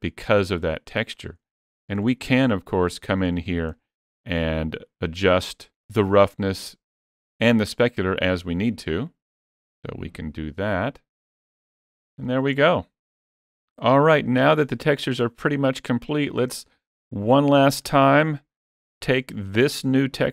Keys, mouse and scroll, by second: 0.0-0.3 scroll down 1, 0.9-1.3 scroll down 4, 1.3 shift+middle click, 1.8-2.6 scroll up 12, 2.6 shift+middle click, 3.1-3.4 scroll up 2, 3.5 shift+middle click, 4.9 click, 7.6 click, 11.7 scroll down 2, 12.1 shift+middle click, 12.5 middle click, 16.7-17.6 scroll down 1, 17.6 scroll down 2, 17.7 shift+middle click, 18.3 scroll down 1, 18.8 shift+middle click.